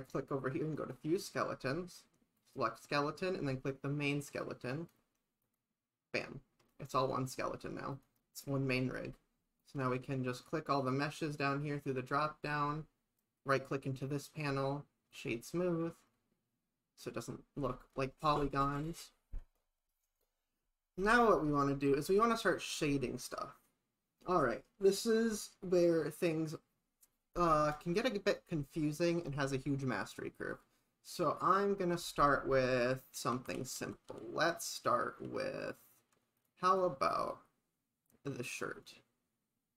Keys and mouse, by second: 0.8 click, 2.4-4.9 drag, 5.5 click, 13.3 right click, 27.8 click, 32.5 shift+`, 36.7 click.